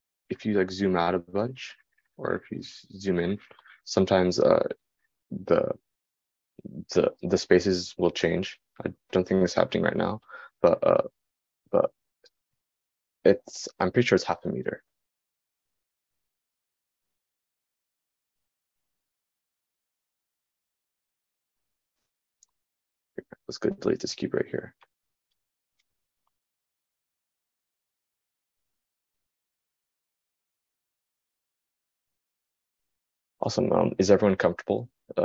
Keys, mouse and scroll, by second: 28.3-30.6 drag, 30.6-35.2 right drag.